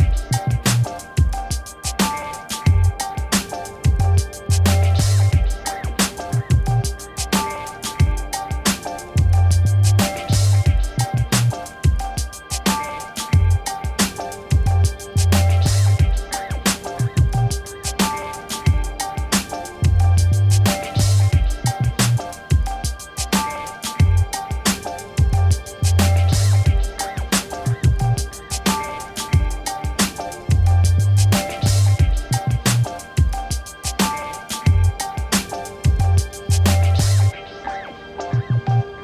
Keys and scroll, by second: 0.8 v, 6.9 t, 21.2-23.5 typing, 25.5 6, 26.4 [, 27.2 Return, 32.7-33.8 typing, 35.5 5, 35.7 2, 36.5 [, 37.9 Return.